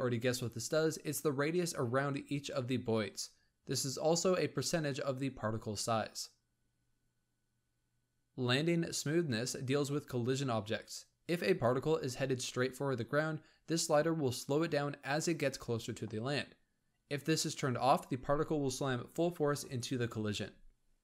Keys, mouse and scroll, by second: 3.7 click, 7.7-10.3 scroll down 8, 10.3 space.